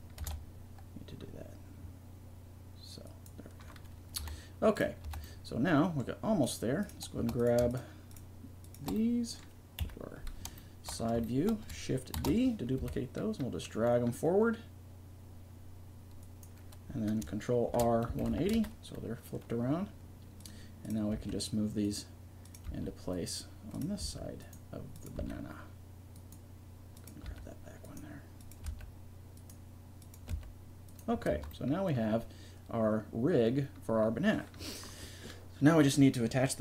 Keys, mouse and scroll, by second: 0.2 ctrl+r, 4.2 s, 5.1 a, 6.5-8.2 right drag, 9.2-10.3 drag, 9.8 KP_3, 12.2 shift+d, 17.7 ctrl+r, 20.4-21.8 right drag, 21.1 g, 22.4 click, 22.6 g, 24.0 g, 25.2 g, 27.3 g, 28.6 g, 30.3 g, 31.3 Tab.